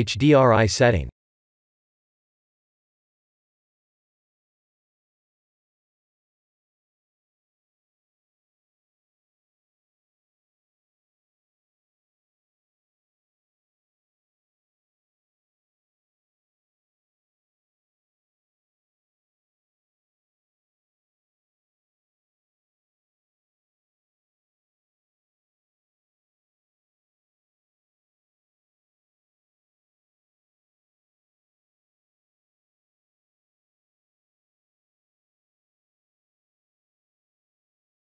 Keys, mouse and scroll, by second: 0.2 click, 1.3 click, 2.4-3.4 scroll up 3, 3.4 click, 4.6 click, 6.3 click, 9.7 click, 10.4 click, 12.6 click, 19.4 click, 21.7 click, 22.9-24.1 scroll down 3, 24.1 click, 24.1-24.8 scroll down 2, 26.6 shift+middle click, 28.9 shift+middle click, 30.1 Tab, 30.8 click, 31.4 3, 31.7 click, 35.0 click, 36.2 click, 37.7 click.